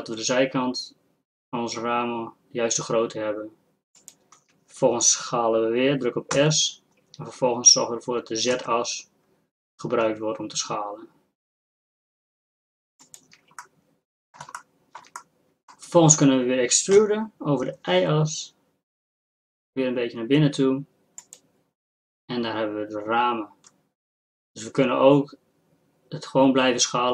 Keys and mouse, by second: 6.4 s, 14.0 click, 15.3-17.0 drag, 17.0 e.